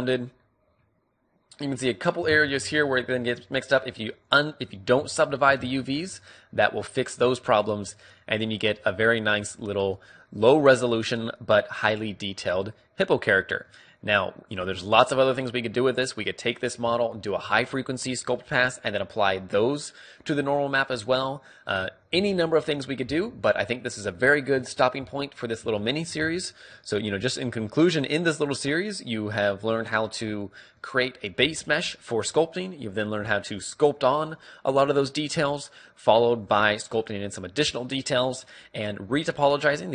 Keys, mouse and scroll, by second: 0.2 middle click, 1.0-3.3 middle drag, 3.0 shift+space, 5.2-6.7 drag, 6.4 shift+space, 6.7-13.2 middle drag, 14.4-19.6 middle drag, 21.7-23.8 middle drag, 25.8 shift+c, 26.0-29.7 middle drag, 31.0-32.7 middle drag, 36.1-38.0 middle drag.